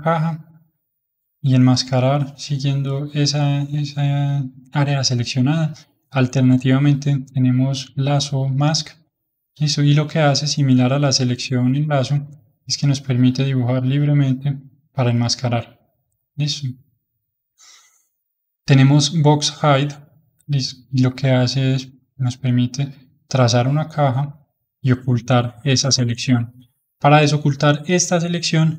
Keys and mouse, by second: 0.6-5.6 middle drag, 5.6-10.3 drag, 10.3-12.6 middle drag, 12.6 click, 14.8-17.8 middle drag, 18.2-21.2 drag, 21.7 click, 24.5-27.6 middle drag.